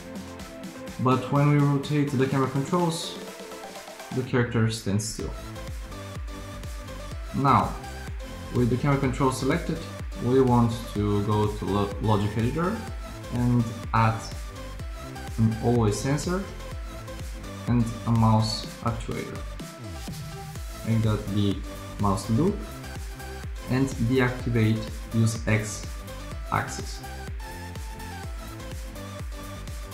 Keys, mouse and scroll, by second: 3.3 r, 19.5 r.